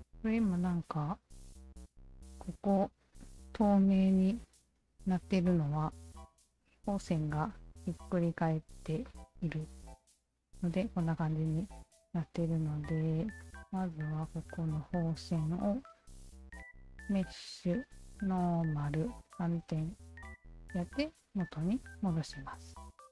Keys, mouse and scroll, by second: 3.7 3, 4.4-5.9 alt+drag, 6.6 alt+click, 8.0 q, 8.2 alt+click, 9.0 alt+click, 9.5-11.4 alt+drag, 12.1 alt+click, 13.4 alt+click, 16.7 alt+click, 18.2 alt+click, 19.4 alt+click, 20.4 alt+click, 20.8-23.1 alt+drag.